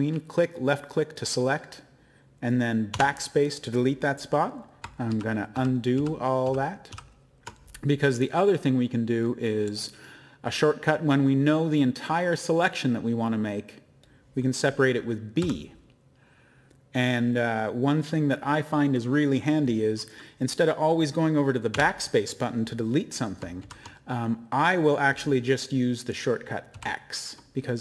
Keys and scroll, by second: 2.9 BackSpace, 5.1 ctrl+z, 5.5 ctrl+z, 5.9 ctrl+z, 6.4 ctrl+z, 6.9 ctrl+z, 15.4 b, 21.7 BackSpace, 23.6 ctrl+z, 26.7 x.